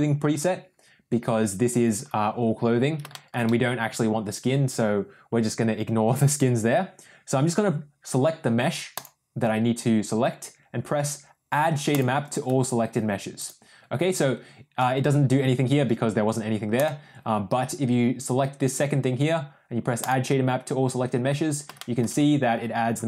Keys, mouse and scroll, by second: 3.0 shift+middle click, 8.8 drag, 11.8-12.3 drag, 13.4 click, 16.7 click, 20.0 click, 21.7 shift+middle click.